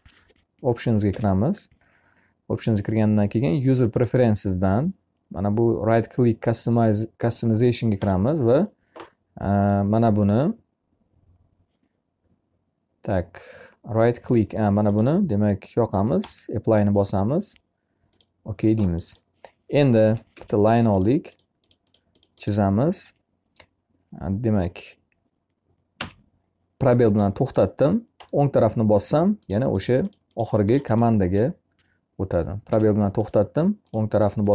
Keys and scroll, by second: 19.4 l, 25.4 space, 32.0 space.